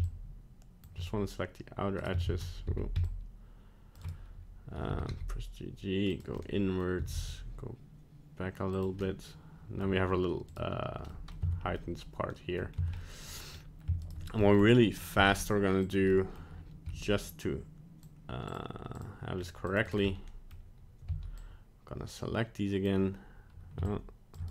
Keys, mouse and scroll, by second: 2.3 ctrl+z, 2.6 c, 4.9 g, 6.3 middle click, 6.9 g, 9.0 middle click, 10.4 right click, 11.0 middle click, 11.3 middle click, 11.4 Tab, 11.8 middle click, 12.7 scroll down 1, 12.8 Tab, 13.0 middle click, 13.5 scroll up 2, 14.0 alt+right click, 14.4 middle click, 15.0 scroll down 1, 15.2 middle click, 15.8 click, 16.1 middle click, 16.3 middle click, 16.8 c, 20.1 middle click, 20.5 middle click, 21.0 c.